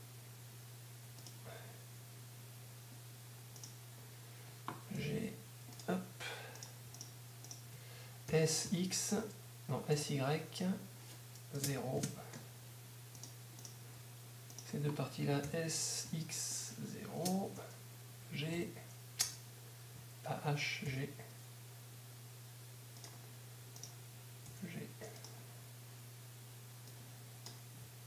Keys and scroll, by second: 0.0 y, 5.0 g, 6.0 g, 9.8-10.5 typing, 12.0 ctrl+y, 16.0 shift+s, 24.5 g, 26.0 g.